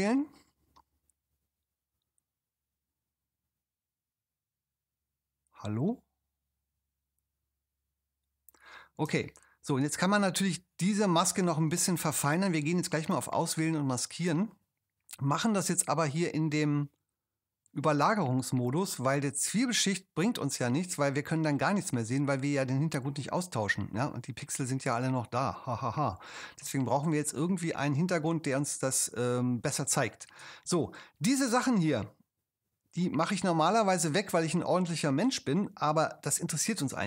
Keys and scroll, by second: 9.0 space, 27.4 super+space.